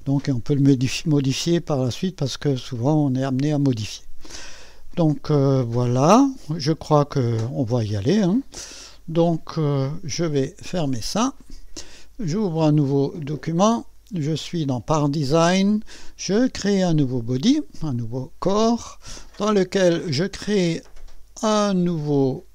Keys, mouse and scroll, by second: 0.0 scroll up 1, 0.1 scroll down 1, 0.2-2.4 scroll up 1, 8.1 click, 9.2 click, 11.0 click, 13.3 click, 17.9 click.